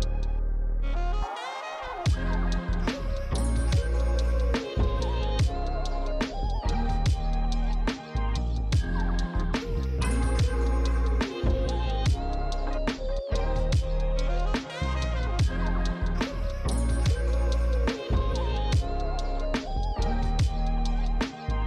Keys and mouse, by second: 0.6 f, 1.3 click, 2.2 click, 2.7 f, 2.8 click, 3.1 f, 3.2 click, 3.5 f, 3.5 click, 4.8 click, 5.0 f, 5.9 click, 6.7 f, 7.9 click, 10.7 click, 12.4 click, 14.2-18.3 typing, 14.2 click, 14.6 click, 14.7 click, 14.9 click, 15.6 click, 16.3 click, 16.5 click, 16.8 click, 17.3 click, 18.2 click, 19.0 click, 19.4 f, 19.4 click, 19.7 f, 20.2 click.